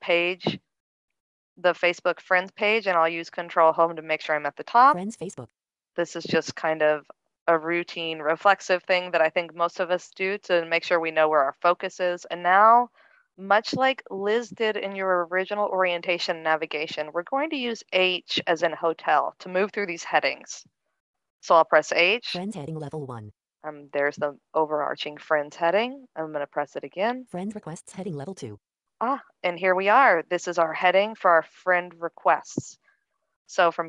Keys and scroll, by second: 3.6 ctrl+Home, 22.0 h.